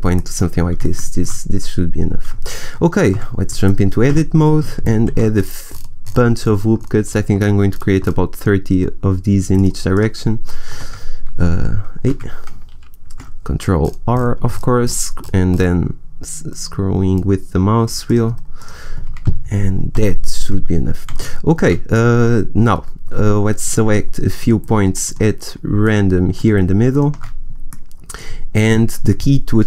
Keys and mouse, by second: 0.1 middle click, 3.0 Tab, 4.0 a, 5.0 ctrl+r, 9.9 click, 10.6 a, 11.3 ctrl+e, 13.7 ctrl+r, 18.6-19.8 drag, 19.8 a, 23.6-24.6 right drag, 27.9-29.6 right drag.